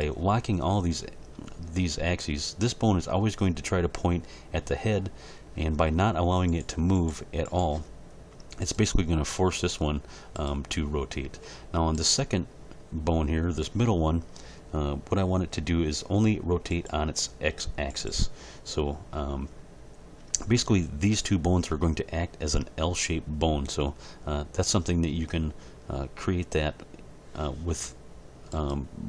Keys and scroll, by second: 9.0 r.